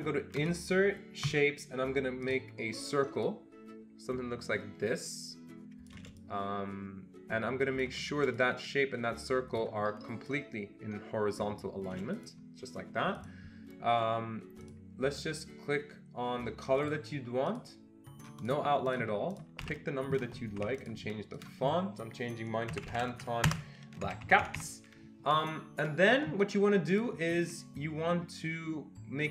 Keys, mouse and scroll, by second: 1.3 click, 2.2 click, 3.3-6.2 shift+drag, 6.5-8.0 shift+drag, 13.2-14.6 shift+drag, 14.6 click, 16.8 click, 17.5 click, 18.9 click, 19.3 click, 19.6 1, 20.6 Escape, 20.8 click, 21.4 click, 22.5-23.6 typing, 24.0 Escape, 24.2 Escape, 24.4 Escape, 24.5 Escape, 27.0 click.